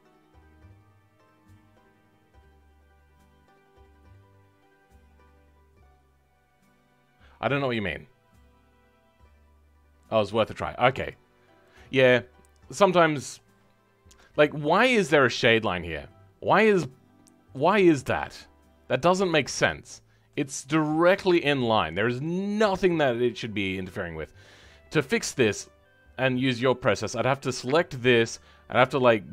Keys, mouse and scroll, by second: 11.3-11.6 scroll down 2, 11.6 middle click, 12.3-12.6 scroll up 2, 12.6-24.6 middle drag, 24.6-25.6 scroll up 2, 27.5 click.